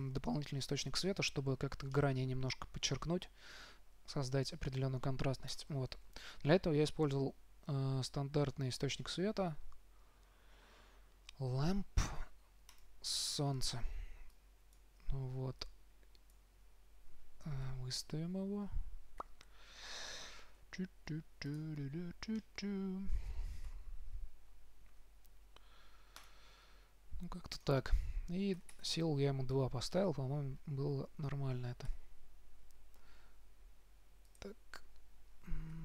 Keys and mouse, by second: 0.0 z, 0.3 z, 2.5-3.6 middle drag, 5.8-7.7 drag, 6.1 shift+a, 14.6 click, 18.0 KP_7, 19.5 KP_1, 20.9 r, 24.0 KP_3, 25.2 r, 26.6-28.6 drag, 30.3 middle click, 32.2 KP_7, 33.5 r.